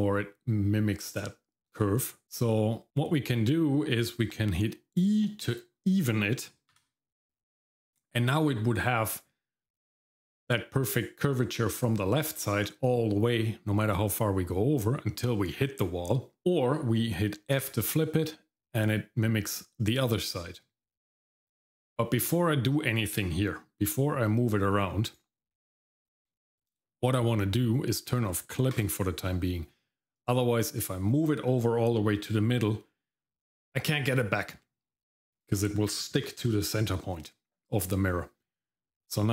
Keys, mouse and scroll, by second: 26.0 middle click, 28.7 click.